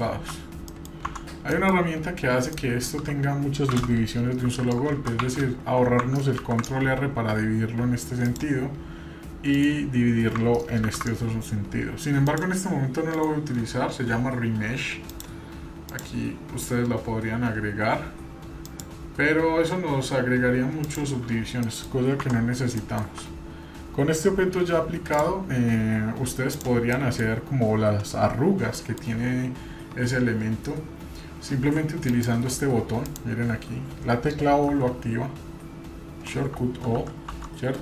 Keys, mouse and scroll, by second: 0.7 middle click, 1.1 Tab, 1.5 middle click, 1.9 scroll up 1, 2.6-2.9 shift+middle drag, 4.4 ctrl+r, 5.2 Tab, 6.4 ctrl+r, 15.1 drag, 15.9-18.9 drag, 20.8 click, 21.6 middle click, 22.4 Tab, 22.8 middle click, 23.0 Tab, 23.5 scroll up 1, 25.1 click, 26.5 click, 27.0 middle click, 28.8 middle click, 32.1 click, 33.0 click, 34.7 o.